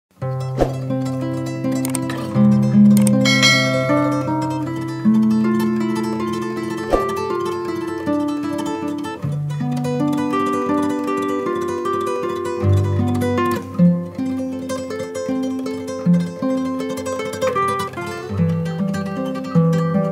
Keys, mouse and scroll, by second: 1.2 click, 1.6 click, 2.6-3.8 drag, 4.4-6.8 drag, 5.9 KP_0, 7.3-9.0 drag, 8.7 KP_0, 10.6 click, 11.5 click, 12.4 click, 13.5 click, 15.4-17.0 drag, 18.1 click.